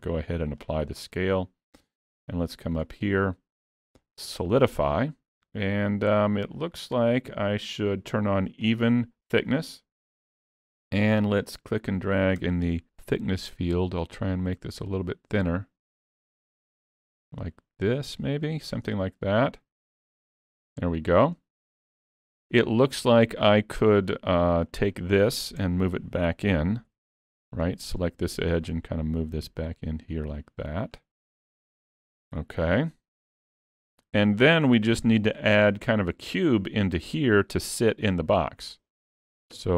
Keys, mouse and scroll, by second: 2.1 click, 6.6 click, 10.3 scroll up 3, 10.7 shift+middle click, 12.3 click, 19.1 middle click, 21.8 scroll up 3, 22.0 shift+middle click, 22.6 middle click, 24.8 click, 27.0 Tab, 27.0 2, 27.9 alt+click, 29.1 click, 31.5 alt+a, 31.8 Tab, 32.3-33.3 scroll down 5, 32.7 alt+a, 33.3 middle click, 34.1 scroll down 1, 34.4 shift+middle click, 34.8 middle click, 37.1 middle click.